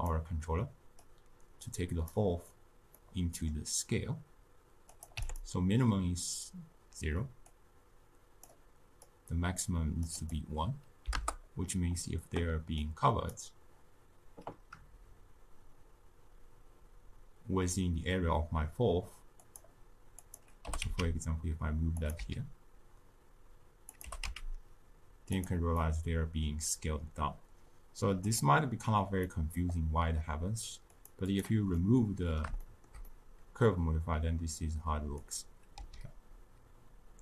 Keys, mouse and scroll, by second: 2.1 click, 3.0-5.2 middle drag, 5.2 click, 7.6-18.6 drag, 19.6 click, 20.3 click, 20.6 g, 22.1 s, 24.0 g, 25.8-28.3 middle drag, 28.3 click, 29.2-30.9 middle drag, 30.9 click, 31.7-35.3 middle drag, 35.3 click, 35.7 s.